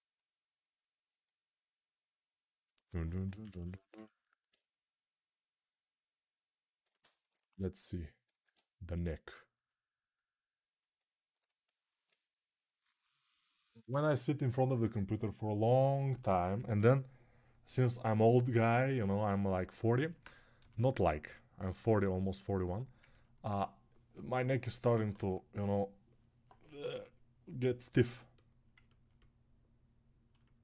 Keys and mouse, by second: 3.2 alt+q, 3.7-30.6 ctrl+alt+drag, 8.3 alt+q, 20.3 g.